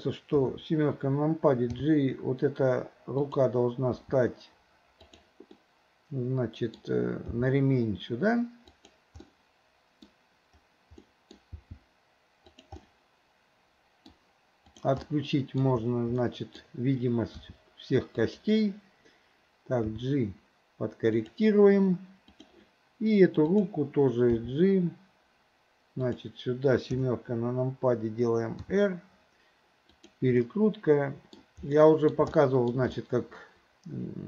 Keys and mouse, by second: 0.4 KP_7, 1.8 g, 4.0 r, 5.6-6.8 middle drag, 7.4 g, 9.3-10.1 middle drag, 11.1 middle drag, 11.6 g, 12.9-14.1 middle drag, 15.1-15.7 middle drag, 16.3-16.6 middle drag, 17.4 r, 19.9 g, 22.4 click, 23.5 click, 24.4 g, 27.0 KP_7, 28.7 r, 30.5-31.4 middle drag, 31.8-32.2 middle drag, 32.4-32.8 shift+middle drag, 33.0-34.2 middle drag.